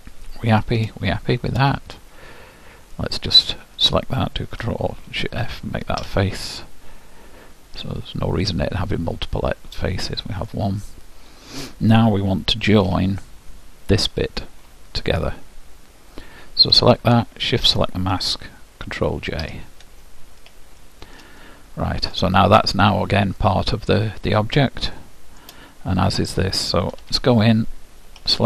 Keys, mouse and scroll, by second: 0.4-2.6 middle drag, 3.4-5.6 drag, 6.1 ctrl+alt+shift+f, 8.4-11.4 middle drag, 12.8 Tab, 13.9-15.7 drag, 17.0-18.8 drag, 19.5 ctrl+j, 20.8-23.2 middle drag, 23.4-26.0 middle drag, 26.0-27.9 drag, 27.0 Tab, 28.3 l.